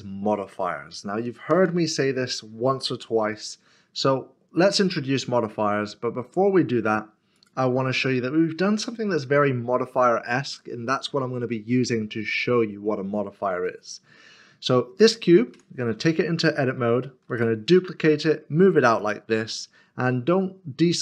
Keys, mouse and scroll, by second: 3.3 x, 5.0 click, 6.1 click, 6.3 scroll up 1, 7.3-9.3 scroll up 1, 15.5 click, 17.3 d, 19.5 middle click.